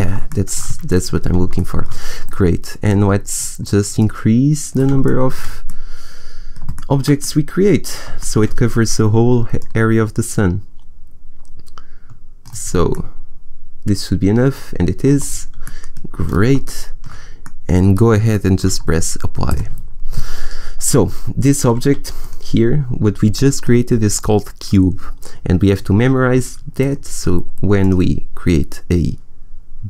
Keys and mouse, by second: 2.8-4.0 middle drag, 4.0 click, 4.9 click, 5.0 middle click, 7.6-9.8 middle drag, 9.8-12.8 drag, 14.4-15.6 middle drag, 19.4-21.4 drag, 21.7 a, 22.1-23.5 right drag, 26.7-27.7 drag, 27.7 middle click, 28.5 click.